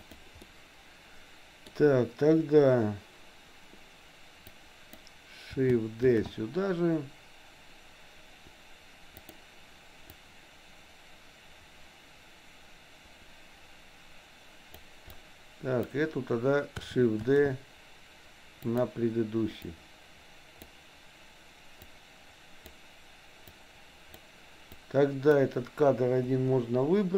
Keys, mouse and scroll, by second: 0.0 click, 0.5-1.7 middle drag, 4.5 click, 6.2 shift+d, 10.2-14.8 drag, 15.2 click, 17.2 shift+d, 19.8-20.8 drag, 22.0 click, 23.5 click, 24.8 click, 26.3 Delete.